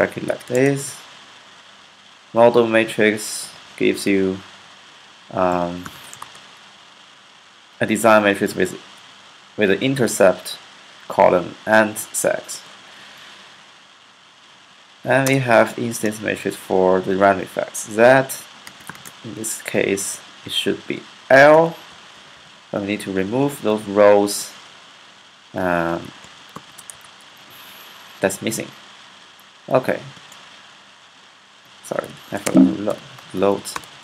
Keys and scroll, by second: 0.0-0.6 typing, 3.2-6.3 typing, 12.7 Right, 14.4 Right, 14.7 ,, 15.2 space, 15.7 shift+z, 18.8 =, 20.9-21.2 typing, 22.0 alt+8, 22.1 alt+9, 22.5 Left, 22.5-23.7 typing, 25.7-27.2 typing, 31.4-34.0 typing.